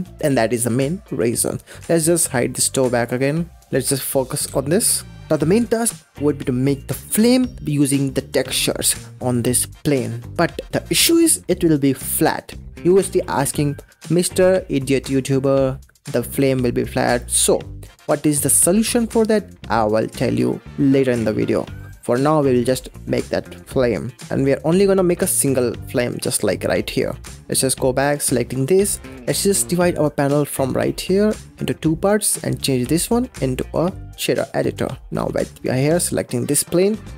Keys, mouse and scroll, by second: 0.2 ctrl+z, 0.5-2.8 middle drag, 2.8 click, 3.6 shift+middle click, 3.7 click, 4.3 Home, 9.1-14.0 middle drag, 15.4-17.1 middle drag, 17.1-18.8 scroll down 2, 24.0 click, 24.2-27.2 scroll up 4, 27.2 click, 27.5 click, 28.0 click, 28.3-30.4 scroll up 8, 30.4-35.6 drag.